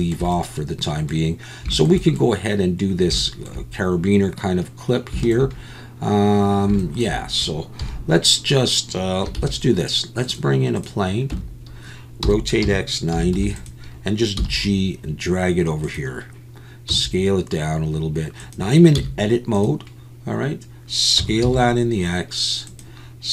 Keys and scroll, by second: 7.8 KP_1, 9.4 shift+a, 11.3 Tab, 12.2 r, 12.6 x, 13.1 9, 13.3 0, 14.4 g, 16.9 s, 18.9 z, 21.2 s, 21.4 x.